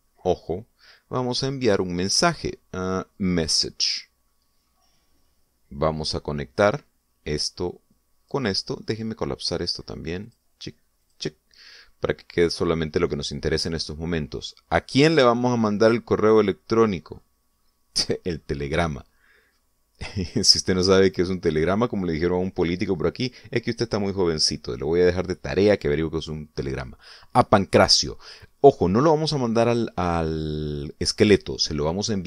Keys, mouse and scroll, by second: 4.4 click, 5.5-5.9 scroll up 2, 7.5-9.4 drag, 11.1 click, 11.9 click, 16.6 click, 18.0-19.5 scroll down 5, 20.3-21.2 scroll up 3, 21.4-21.8 scroll up 1, 22.1 scroll down 1, 28.8 click.